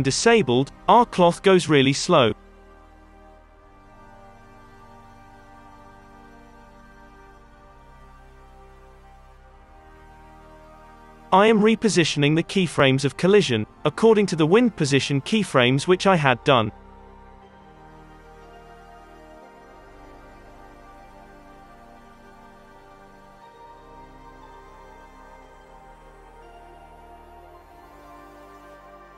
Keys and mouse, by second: 8.5-9.7 middle drag, 9.7 alt+a, 9.9 b, 10.4-12.2 middle drag, 10.6 b, 11.0 g, 11.9 space, 14.6 space, 14.8 middle click, 15.1 space, 15.5 space, 15.7-19.6 drag, 16.0 space, 17.4 space, 19.9 middle click, 20.3 alt+a, 20.6-22.7 drag, 21.9 space, 24.1 space, 24.3 click, 25.2 space.